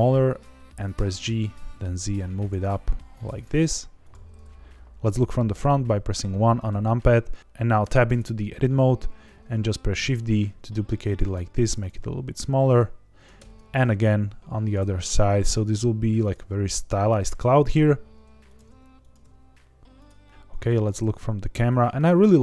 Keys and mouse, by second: 0.3 click, 0.9 g, 1.1 z, 2.4 click, 2.6 s, 3.3 click, 3.5 g, 3.5 z, 4.0 click, 5.5 KP_1, 6.6 shift+middle click, 7.8 Tab, 9.9 shift+d, 11.0 click, 11.3 s, 11.8 click, 11.9 g, 12.6 click, 13.3 shift+d, 14.6 click, 14.8 s, 16.2 click, 16.9 Tab, 17.7 s, 18.4 click, 18.5 g, 18.6 z, 19.0 click, 19.2 s, 19.9 click, 20.3 KP_0, 20.9 r, 21.1 z.